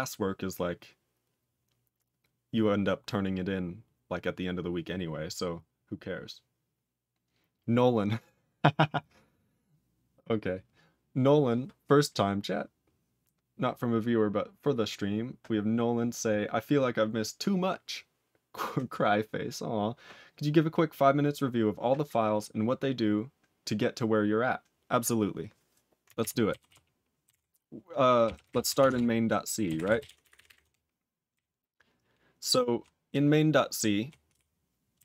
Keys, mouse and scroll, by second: 26.1 ctrl+g, 26.6 ctrl+s, 28.9 ctrl+Return, 29.8 ctrl+s, 30.0 ctrl+=, 31.3-32.7 ctrl+n, 33.1-34.0 ctrl+p, 34.3 ctrl+p.